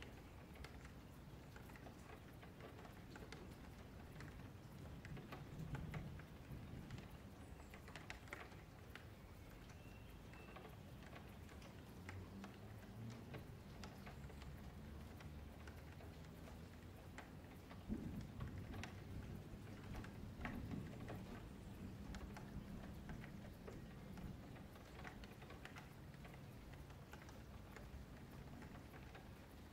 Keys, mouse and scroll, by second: 1.6 2, 1.8 click, 2.5 q, 3.9 click, 4.7 ,, 5.8-7.0 middle drag, 7.0 q, 7.9 3, 8.1 click, 9.1 s, 12.1 click, 12.9 s, 15.3 click, 16.1 s, 18.7 middle click, 19.4 Tab, 20.0 click, 20.3 middle click, 20.6 Tab, 21.1 3, 21.4 click, 22.2 shift+d, 23.2 click, 24.4 2, 24.6 click, 25.4 click, 26.6 click, 27.8 g, 29.5-29.7 middle drag.